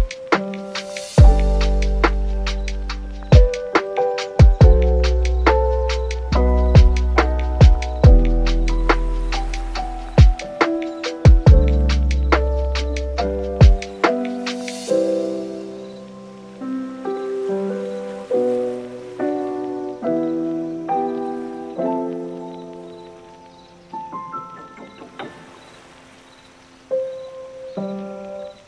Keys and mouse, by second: 1.6 click, 6.7 click, 6.8 click, 11.2 click, 11.6 click, 11.9 click, 15.4 super+s, 15.5 super+s, 15.8 super+s, 18.4 s, 24.9 click, 25.5 super+s, 27.2 click, 27.6 super+s.